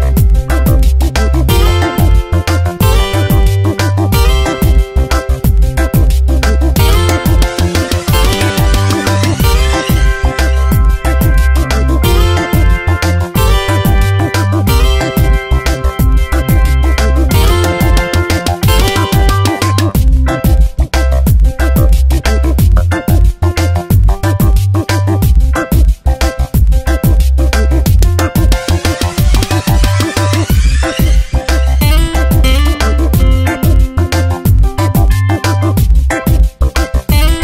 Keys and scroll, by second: 1.0 Return, 2.5 alt+Right, 3.5 shift+Up, 3.7 shift+Right, 4.5 Up, 4.8 Right, 5.0 Up, 5.2 ctrl+t, 7.1 Return, 8.5 Up, 8.9 Right, 9.4 Right, 9.6 shift+Up, 10.1 shift+Up, 10.3 shift+Right, 11.7 Up, 12.2 Right, 12.6 Up, 12.8 Right, 14.2 shift+Up, 14.4 shift+Right, 15.0 Left, 15.2 Up, 15.7 ctrl+t, 16.8 Return, 17.2 shift+Up, 17.4 Left, 17.6 Down, 17.9 Left, 18.0 Down, 18.4 Left, 18.7 alt+Right, 19.2 shift+Up, 19.3 shift+Right, 19.9 shift+Up, 20.0 shift+Right, 20.3 shift+Up, 20.6 shift+Right, 21.2 alt+Right, 21.6 shift+Up, 21.8 shift+Right, 22.1 shift+Up, 22.2 shift+Right, 22.3 shift+Up, 22.5 shift+Right, 23.2 ctrl+t, 24.1 Return, 24.4 space, 25.5 alt+Up, 25.8 shift+Right, 26.3 shift+Right, 26.7 shift+Up, 27.2 ctrl+t, 28.0 Return, 28.4 shift+Right, 28.8 shift+Up, 29.4 ctrl+t, 30.9 Return, 31.3 shift+Right, 31.5 shift+Up, 32.0 Right, 32.7 ctrl+t, 34.0 Return, 35.7 alt+Right, 36.0 shift+Up, 36.3 shift+Right, 36.6 Up, 36.8 Left, 37.2 Up.